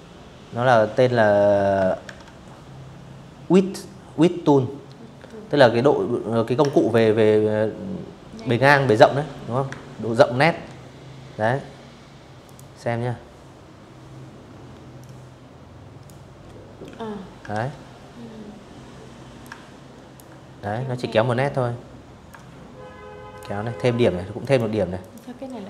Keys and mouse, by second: 4.3 ctrl+click, 7.3 Escape, 8.1 v, 10.1 click, 12.6-13.7 drag, 15.2 ctrl+z, 17.0 ctrl+click, 19.9-21.0 ctrl+drag, 22.0 click, 22.6 click, 23.8-25.1 drag.